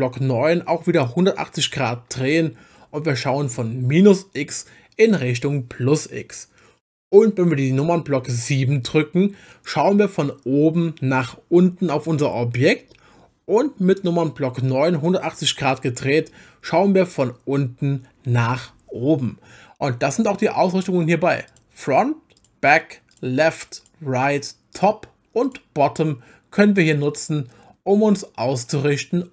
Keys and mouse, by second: 2.0 KP_9, 8.4 KP_7, 14.9 KP_9, 21.5 click, 22.4 click, 23.1 click, 23.8 click, 24.7 click, 25.4 click, 28.5-29.3 middle drag.